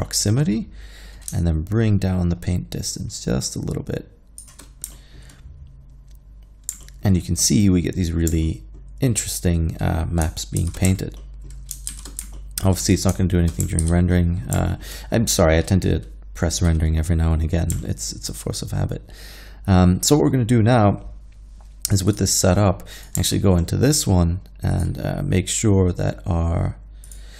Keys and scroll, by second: 10.6 shift+z, 11.9 shift+z, 13.8 alt+a.